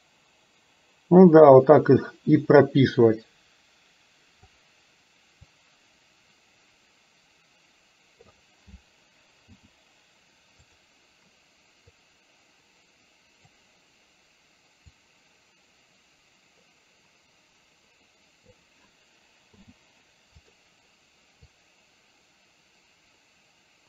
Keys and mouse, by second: 5.7-8.4 drag, 9.5 i, 12.0-13.6 drag, 15.0-18.6 drag, 19.6 i, 21.5-23.8 drag.